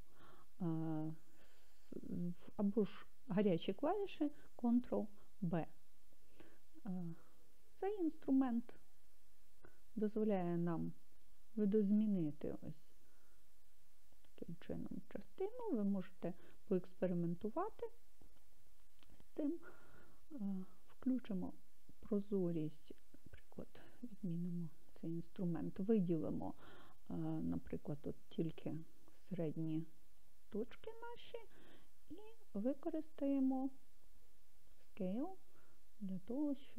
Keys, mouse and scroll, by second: 7.0 click, 7.6 click, 20.9 click, 24.0 click, 27.0 click, 28.3-30.3 drag, 35.0 s.